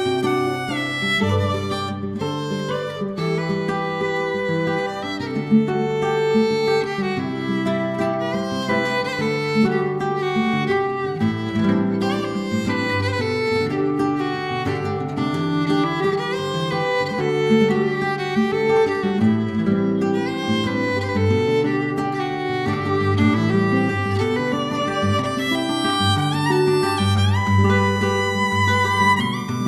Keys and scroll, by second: 0.7 3, 0.8 Return, 2.9 w, 3.5 ctrl+z, 6.5-8.9 typing, 11.6-13.7 typing, 14.2 F2, 14.3 Escape, 15.3-17.3 typing, 19.9 ctrl+c, 20.0 ctrl+v, 20.4-21.2 typing, 22.2 ctrl+c, 22.3 ctrl+v, 22.4-23.6 typing, 24.3 ctrl+c, 28.6 ctrl+z, 29.3 ctrl+z, 29.6 BackSpace.